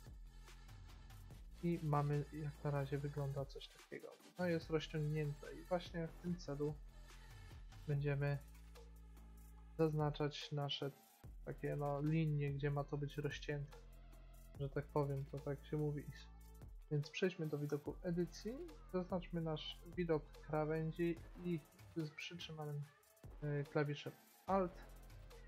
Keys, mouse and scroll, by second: 0.5-1.8 middle drag, 8.4-9.5 drag, 17.8 Tab, 19.8-21.3 drag, 21.7-23.8 middle drag, 24.6-25.4 right drag.